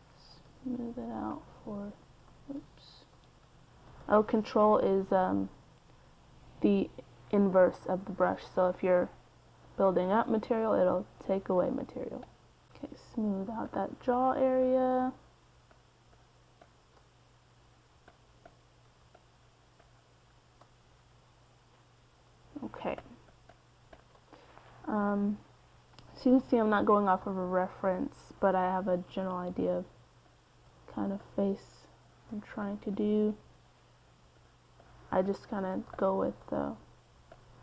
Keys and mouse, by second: 0.0 ctrl+z, 1.1 ctrl+z, 1.3-5.3 middle drag, 6.2-14.3 middle drag, 14.5-20.5 middle drag, 20.7 middle click, 21.3-25.6 middle drag, 25.6-32.2 drag, 35.1-36.3 middle drag, 37.2-37.6 drag.